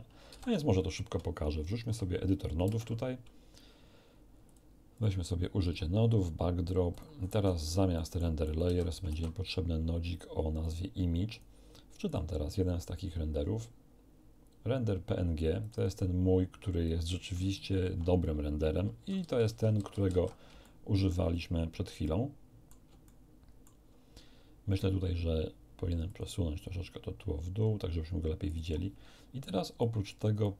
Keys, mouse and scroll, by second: 0.2 ctrl+d, 1.8 shift+F3, 2.6 shift+space, 4.4 click, 4.9 click, 5.6 click, 6.9 click, 7.2-7.8 scroll up 1, 7.8 scroll down 1, 7.9 middle click, 8.4 scroll down 1, 8.4 click, 8.6 x, 9.0 shift+a, 10.6 click, 11.3 click, 12.0 click, 15.6 click, 16.8-17.8 drag, 19.0 alt+v, 19.2 alt+v, 20.6-21.2 ctrl+alt+shift+middle drag, 22.0 middle click, 23.0 ctrl+shift+middle click, 26.0 click, 28.4 click, 29.8 click.